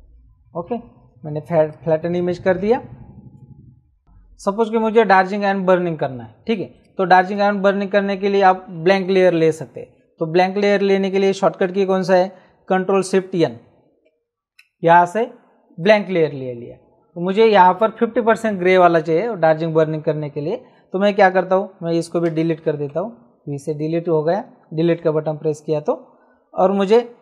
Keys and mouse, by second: 1.5 space, 1.7 click, 6.6 space, 6.7 click, 14.0 ctrl+shift+n, 15.8 click, 22.2 v, 22.8 Delete.